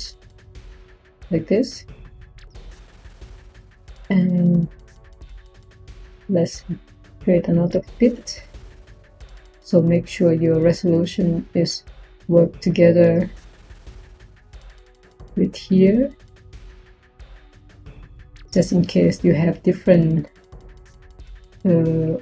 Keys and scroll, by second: 4.7 Tab, 7.2-8.8 typing, 12.3-13.1 typing.